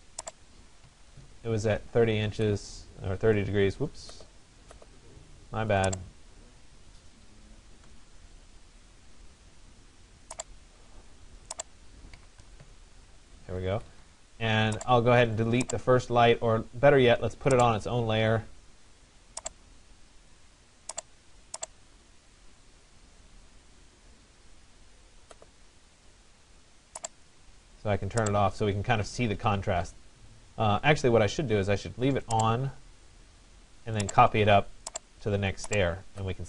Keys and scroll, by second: 0.5 3, 1.1 0, 1.3 Return, 11.8 6, 12.5 0, 12.7 Return, 13.8 Escape.